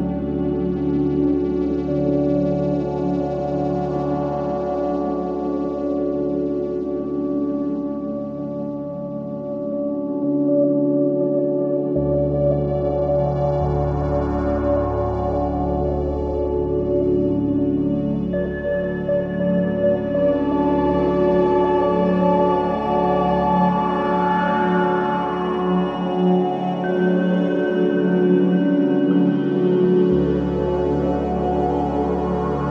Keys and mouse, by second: 0.7 click, 1.8 shift+click, 4.4 ctrl+i, 5.8 Page_Down, 6.1 Down, 6.9 Return, 11.4-13.5 drag, 13.7 click, 15.4 click, 16.3 shift+click, 18.0 ctrl+i, 19.0 Return, 21.4-23.8 drag, 24.0 click, 25.2 right click, 26.4 click, 27.8 click, 28.9-30.4 ctrl+alt+middle drag, 31.4 middle click, 32.3 ctrl+c.